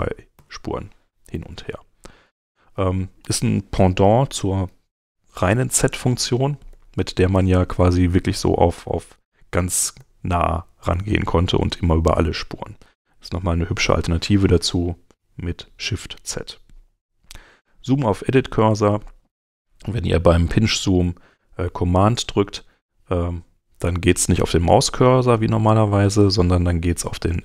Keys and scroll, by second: 0.3 shift+z, 5.8 z, 8.6 z, 10.0 z, 11.1 z, 12.8 super+z, 14.0 super+Tab, 21.3 super+Tab.